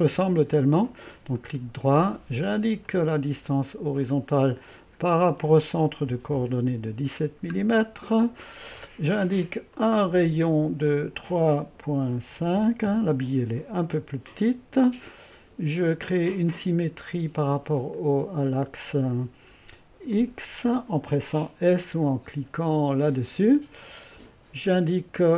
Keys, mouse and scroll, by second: 1.4-3.6 drag, 4.1 click, 5.1-6.1 drag, 5.9-6.6 typing, 6.7 Return, 9.8-11.7 drag, 12.1 KP_3, 12.4 KP_Decimal, 12.6 5, 12.9 Return, 16.3-17.4 drag, 18.0 click, 20.1-21.5 drag, 23.1 s, 25.2-25.3 drag.